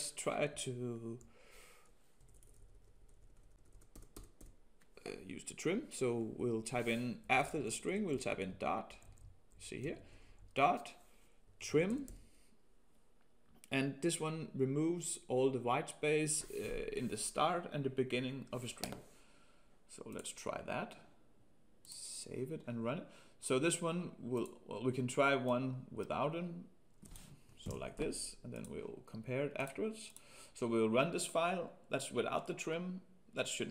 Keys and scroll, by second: 27.6 ctrl+x.